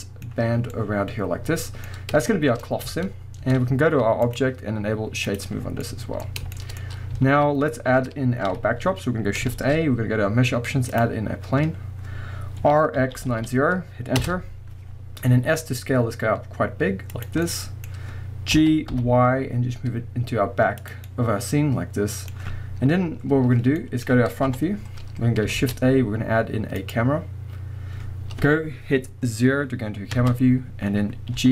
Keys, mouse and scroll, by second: 1.9-2.3 scroll up 2, 2.9 Tab, 4.3-5.8 drag, 5.5-5.8 scroll down 2, 5.8-6.2 middle drag, 6.2-6.6 scroll up 2, 6.6 shift+middle drag, 6.8-7.3 scroll up 2, 7.3 alt+a, 7.5-8.5 scroll down 2, 8.5 KP_1, 9.5 shift+a, 11.3 scroll down 1, 11.9-12.5 scroll up 1, 12.6-14.3 middle drag, 12.6 r, 14.3 Return, 14.8 scroll down 1, 15.4-17.3 middle drag, 15.4 s, 17.3 drag, 17.5-18.5 middle drag, 17.9-18.5 scroll down 1, 18.5 g, 18.9-20.9 middle drag, 20.9 click, 21.1-24.5 middle drag, 24.5 KP_1, 25.1-25.5 scroll up 1, 25.5 shift+a, 30.1 KP_0, 31.3 g.